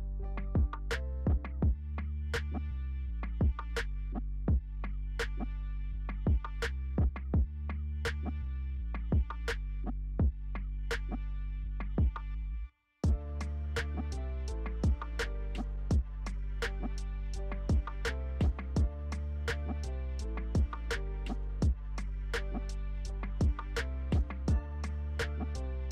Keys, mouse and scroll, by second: 1.1 alt+click, 2.4 alt+F4, 3.7 alt+click, 6.7 alt+Delete, 7.5 alt+click, 8.5 alt+Delete, 9.4 alt+click, 9.8 alt+Delete, 10.5-14.1 alt+drag, 14.1 alt+right click, 16.9 alt+click, 22.1 alt+scroll up 1, 23.2-25.3 alt+drag, 25.3-25.6 alt+scroll down 1.